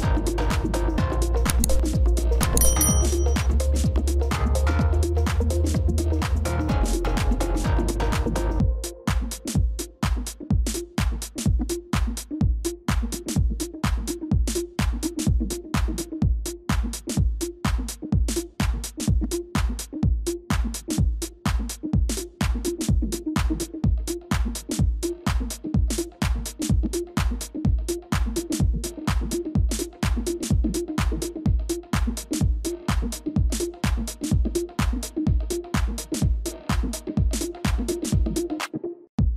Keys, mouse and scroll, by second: 0.5 ctrl++, 0.7 ctrl++, 1.2 space, 8.0-13.3 typing, 16.7-17.8 typing, 22.2-23.0 typing, 25.7 double click, 26.4-27.1 typing, 32.0 shift+click, 35.7 ctrl+-, 37.3 ctrl+y.